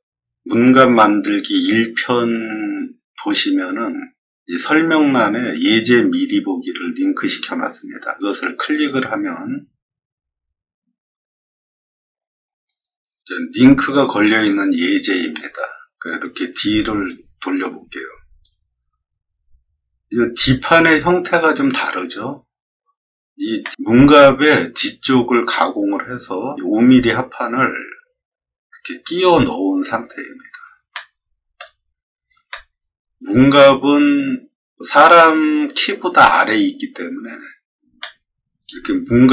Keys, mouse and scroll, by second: 4.3 middle click, 8.6 click, 16.0-17.0 drag, 17.5 click, 19.0 middle click, 19.2 middle click, 19.3 middle click, 23.6 middle click, 30.9 middle click, 32.4 shift+middle click, 37.7 scroll down 2, 37.9 shift+middle click.